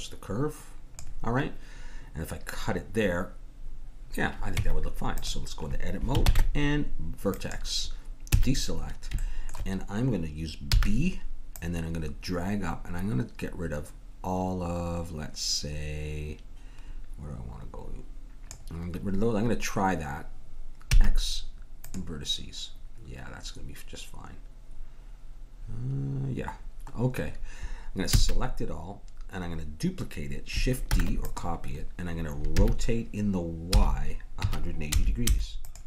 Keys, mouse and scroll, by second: 4.6 Tab, 6.2 ctrl+Tab, 8.8 a, 10.7 b, 20.9 x, 28.2 a, 30.9 shift+d, 32.6 r.